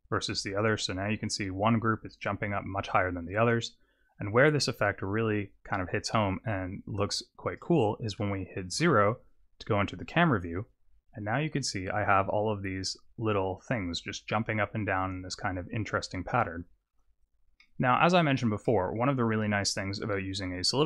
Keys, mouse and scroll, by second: 6.6 click, 8.8 KP_0, 11.4-12.2 scroll up 3, 17.4 click, 17.6 middle click, 18.1-18.6 scroll down 4, 18.6 middle click, 19.2-20.1 scroll up 1, 20.1 scroll up 4.